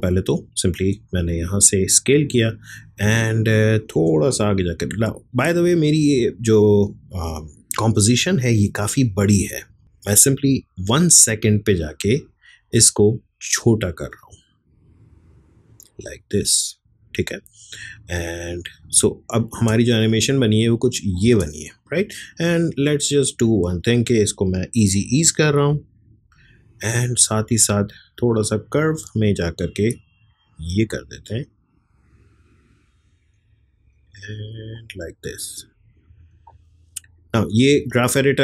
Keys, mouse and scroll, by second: 1.8-4.6 drag, 4.6 typing, 6.0 =, 8.6 click, 10.0-19.5 drag, 19.5 space, 21.9-25.7 drag, 25.7 F9, 27.4-38.4 drag.